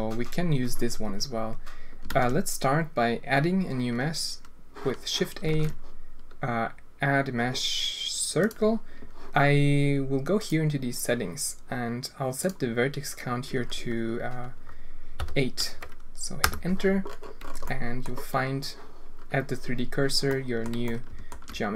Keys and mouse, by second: 2.1 shift+a, 5.5 shift+a, 12.4-16.7 drag, 17.7-18.1 drag, 20.3 drag, 20.8-21.3 alt+drag.